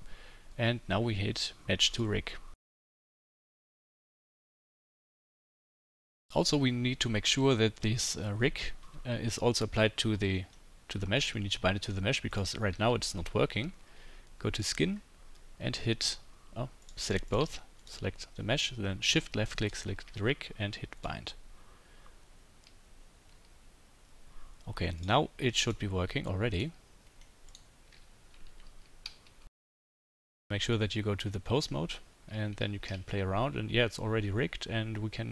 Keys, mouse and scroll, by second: 12.4-14.6 middle drag, 12.7 g, 14.6 click, 14.7-16.8 middle drag, 16.8 click, 16.9 middle click, 17.0 click, 17.9-19.6 middle drag, 19.6 shift+click, 19.7-21.0 shift+middle drag, 21.0-26.6 drag, 26.6-35.3 middle drag, 27.9 g, 32.3 g.